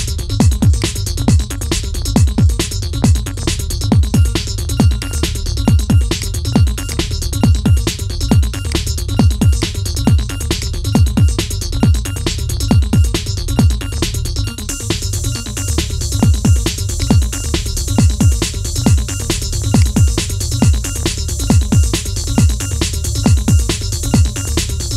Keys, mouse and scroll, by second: 1.8-2.3 scroll up 3, 2.3 shift+middle click, 3.7-4.8 middle drag, 4.8 shift+click, 5.9 shift+click, 7.2-7.5 scroll down 4, 7.5 shift+middle click, 7.8-8.1 scroll up 3, 8.4 shift+click, 9.3 shift+click, 11.8-13.1 scroll down 4, 13.1 KP_1, 13.6-14.2 scroll up 4, 14.2 shift+middle click, 14.9 g, 17.6-18.0 scroll down 4, 18.7 /, 19.5 click, 20.1-20.6 scroll down 3, 20.6-21.8 shift+middle drag, 21.8 scroll up 1.